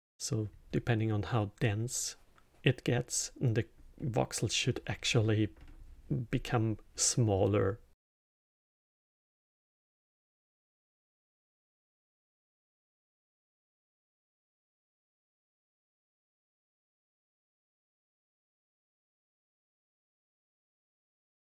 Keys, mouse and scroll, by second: 7.9 click, 8.4 click, 9.4 shift+d, 10.7 scroll up 2, 11.1 middle click, 11.7-13.6 drag, 13.6-15.9 middle drag, 15.9 drag, 18.3 drag, 19.7-21.6 middle drag.